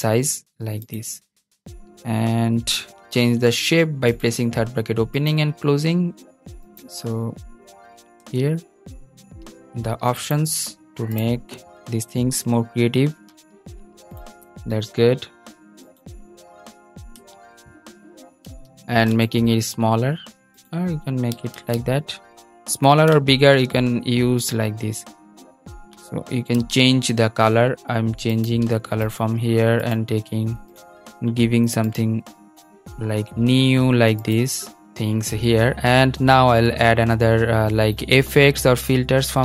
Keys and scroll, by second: 7.9 super+z, 16.8 super+z, 21.2 super+z, 26.3 super+z.